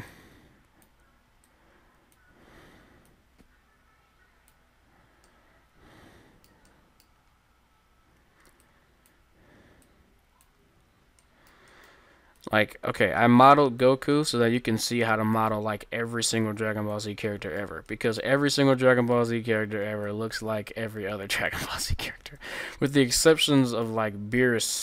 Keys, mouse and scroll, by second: 5.4-6.4 middle drag, 8.6-10.3 drag, 10.4-11.8 drag, 11.2-12.3 middle drag, 12.4-14.2 drag, 12.4-13.5 middle drag, 14.2-15.4 middle drag, 16.4-18.2 drag, 16.4 middle click, 17.4-18.5 middle drag, 18.6 middle click, 18.8-20.4 middle drag, 20.1-22.1 drag, 22.1-24.8 middle drag, 24.5-24.8 drag.